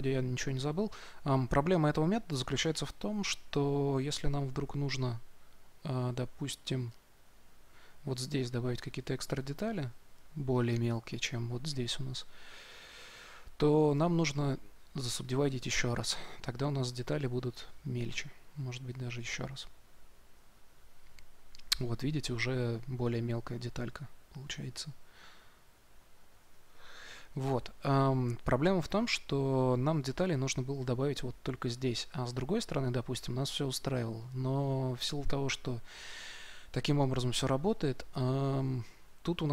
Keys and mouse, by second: 8.3-18.3 drag, 18.8-21.8 drag.